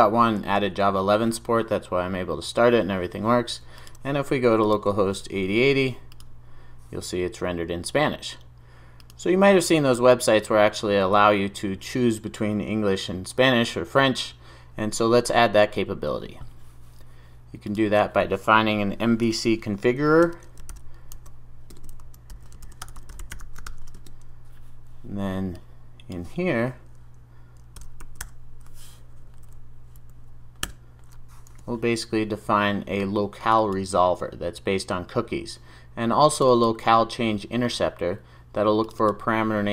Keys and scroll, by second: 30.8 Return, 33.4 super+s.